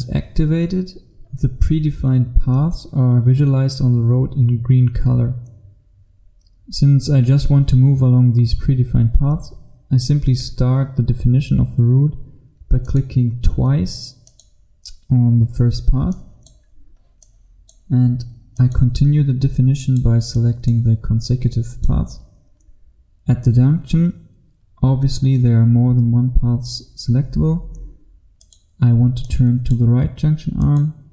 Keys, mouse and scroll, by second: 12.9 click, 22.8-27.4 scroll up 1, 27.4-28.5 scroll up 1, 28.5 click.